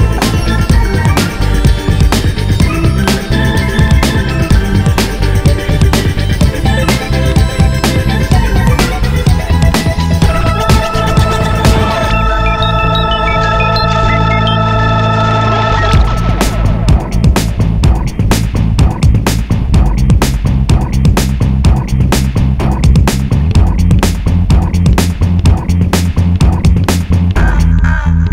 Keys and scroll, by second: 0.3 BackSpace, 1.0 BackSpace.